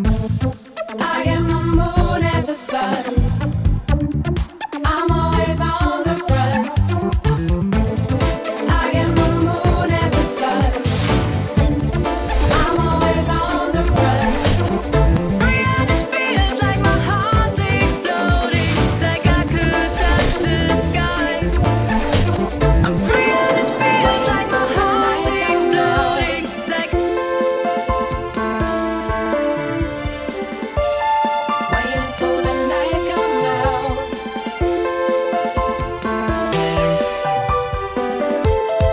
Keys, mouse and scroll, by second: 4.5 click, 5.1-14.7 drag, 20.0-20.3 scroll up 3, 22.6-23.3 click, 22.8 click, 23.2 click, 23.5 click, 23.6 scroll, 24.1-25.6 scroll down 24, 25.6 middle click, 25.6 scroll, 25.8-27.4 right drag, 27.4-28.1 drag, 28.1 right click, 28.4-36.4 drag, 37.4 click, 38.3-38.9 drag.